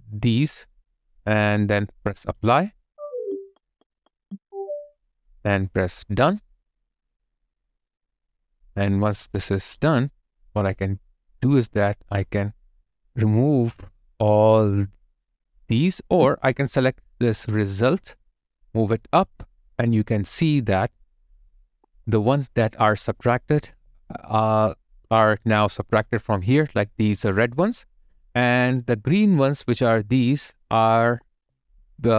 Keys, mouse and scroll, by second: 0.3 right click, 15.9 ctrl+z, 19.8 ctrl+z, 19.8 alt+click, 22.0 alt+middle click, 23.8 alt+click, 26.5 alt+click, 31.4 alt+click.